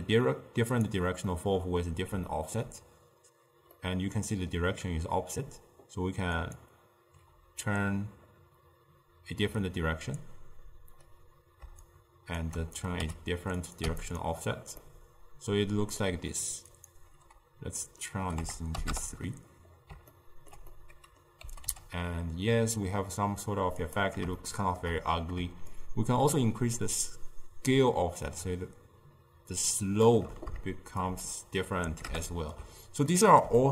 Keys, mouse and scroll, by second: 1.4 middle click, 2.4-6.7 ctrl+middle drag, 6.7 click, 7.7-10.9 middle drag, 11.9-13.1 shift+drag, 13.1 2, 13.7 click, 14.9-16.8 middle drag, 16.8-19.8 drag, 20.2-21.5 ctrl+middle drag, 21.5 g, 24.5-25.8 shift+middle drag, 25.8-29.2 shift+drag, 31.1-33.2 shift+drag, 33.2-33.7 ctrl+middle drag.